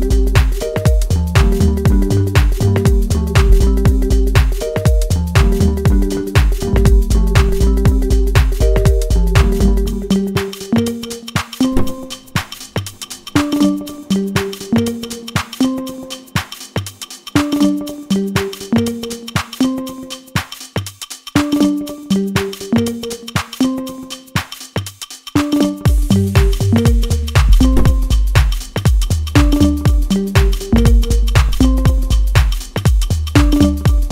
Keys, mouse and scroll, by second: 7.8-11.0 middle drag, 11.0-14.5 drag, 14.5-15.8 middle drag, 15.8 scroll down 1, 16.5-16.9 shift+scroll down 1, 16.9 shift+middle click, 17.5-17.8 scroll up 1, 17.9-20.8 middle drag, 20.8-21.4 scroll up 1, 21.4-21.8 scroll down 1, 22.0 middle click, 22.6-23.2 scroll up 1, 23.2-24.8 middle drag, 24.8 click, 29.7-33.7 drag, 33.7 middle click.